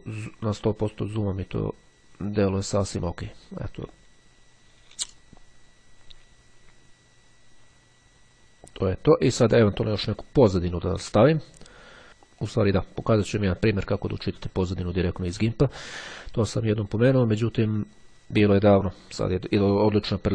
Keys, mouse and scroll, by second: 12.4 click, 13.9 click, 17.7 click.